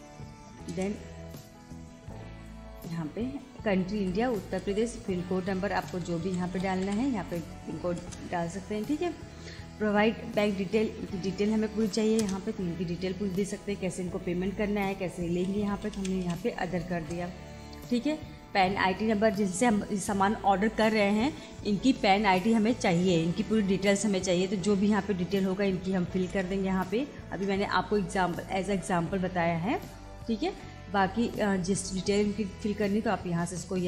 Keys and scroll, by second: 0.7 Return, 3.9 Return, 5.6 8, 6.7 3, 6.9 6, 8.0 Return, 11.8 y, 12.2 Return, 15.7 Down, 16.9 Return, 25.8 7, 27.3 Return, 30.1 Return.